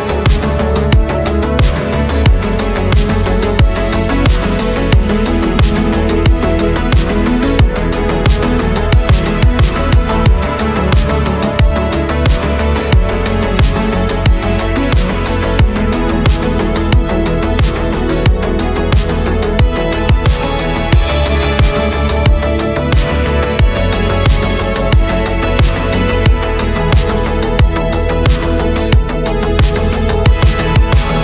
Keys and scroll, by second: 0.5 ctrl+z, 4.9 ctrl+z, 5.5 ctrl+z, 10.1 ctrl+z, 11.1 space, 12.9 ctrl+z, 22.9 space, 27.2 ctrl+z, 28.8 space, 29.7 ctrl+z, 30.1 ctrl+z.